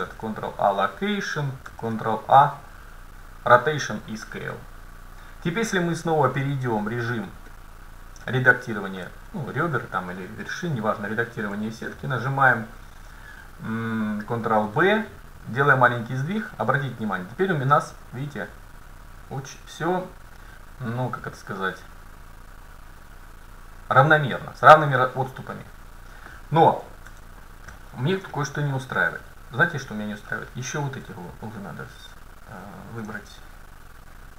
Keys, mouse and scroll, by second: 0.0 ctrl+a, 1.7 ctrl+a, 4.3 middle click, 5.7 Tab, 6.9 Tab, 7.6-9.0 middle drag, 10.2-12.0 middle drag, 14.5 ctrl+b, 27.1 ctrl+z, 28.4 middle click, 31.4-32.6 middle drag, 31.4-34.1 right drag, 33.2-34.3 middle drag.